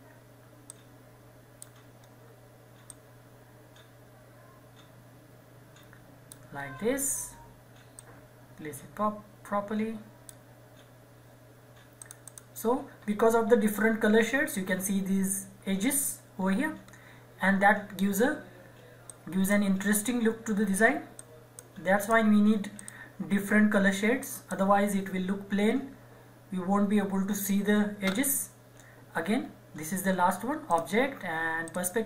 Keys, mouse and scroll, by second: 0.7 click, 1.9 scroll up 1, 2.9-6.5 drag, 6.5-7.9 scroll down 1, 8.0-12.0 drag, 12.7 scroll down 1, 14.9 scroll up 1, 16.4-16.8 scroll down 1, 17.9 scroll up 1, 19.1-22.0 drag, 23.7-24.2 scroll up 1, 24.2 click, 29.4-30.7 scroll down 1, 30.7 click.